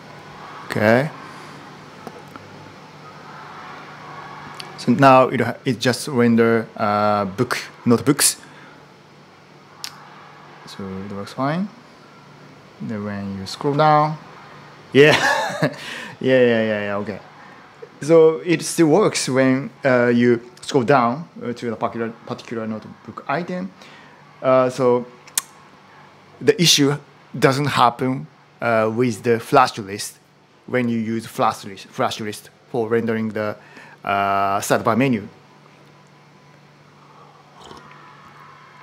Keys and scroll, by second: 4.7 typing, 12.2 typing.